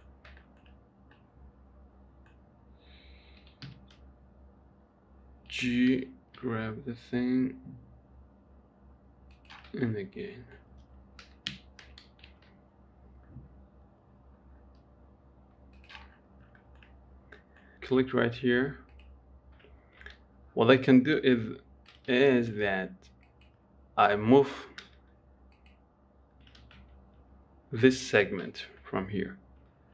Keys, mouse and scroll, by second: 0.0 middle click, 0.3-0.7 scroll up 3, 0.7 shift+middle click, 1.0-1.5 scroll up 2, 1.5-2.9 middle drag, 2.9-5.9 right drag, 5.9 g, 10.1-11.5 middle drag, 11.5 g, 16.4-16.9 scroll down 5, 16.9 shift+middle click, 17.3 scroll up 1, 17.7 middle click, 17.7 click, 19.2 click, 20.1 Tab, 21.5 click, 22.4 ctrl+z, 23.6 shift+click, 25.1 x, 26.9 ctrl+z, 27.5 x.